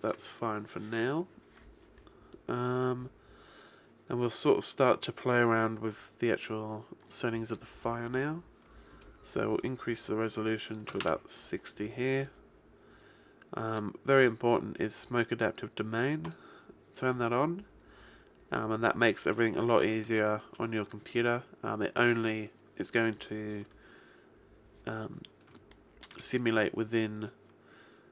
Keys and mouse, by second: 0.0 Escape, 5.2-7.5 middle drag, 7.5 click, 9.6 click, 14.5-18.0 drag, 18.9 click, 25.7-28.0 middle drag.